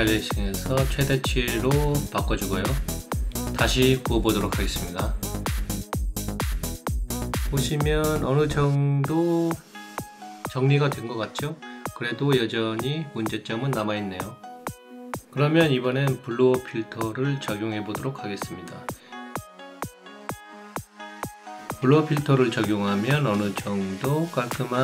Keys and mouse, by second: 0.3 click, 1.3 click, 3.3 click, 7.5 click, 8.2 alt+middle click, 9.2 alt+right click, 10.8 alt+click, 12.9 click, 13.5 right click, 17.3 click, 19.7 click, 20.9 click.